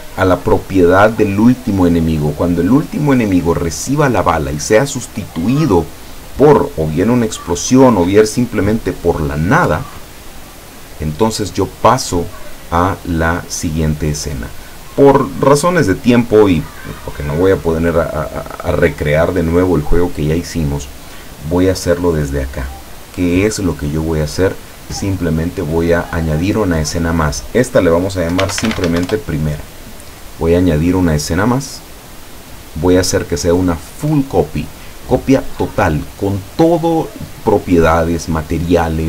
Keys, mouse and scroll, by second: 14.3 right click, 17.2 click, 27.3 click, 28.4 p, 28.5 r, 28.7 m, 28.9 a, 29.1 Return, 31.1 click.